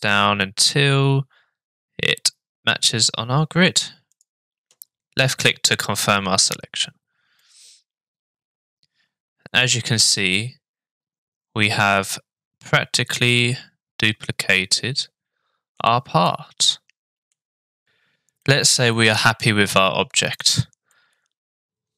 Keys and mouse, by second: 7.4-15.8 middle drag, 16.3-17.3 middle drag, 18.4-20.2 middle drag, 20.9-21.9 middle drag.